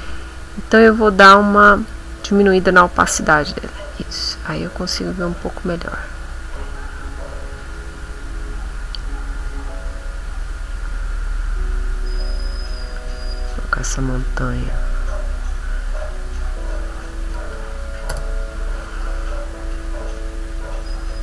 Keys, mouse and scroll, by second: 1.7 click, 3.3-17.5 drag, 18.1 Return, 18.7 middle click.